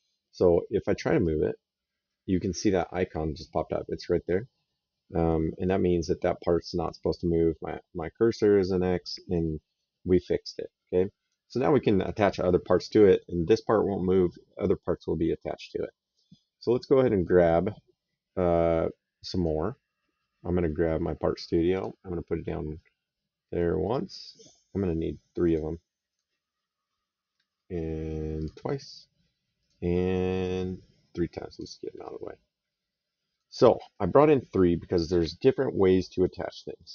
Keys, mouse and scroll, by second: 0.2 right click, 1.0 click, 4.1 click, 11.8 click, 17.0 click, 19.2 click, 21.6 click, 23.6 click, 25.3 click, 28.2 click, 29.4 click, 31.3 click, 33.1 click, 34.0 middle click.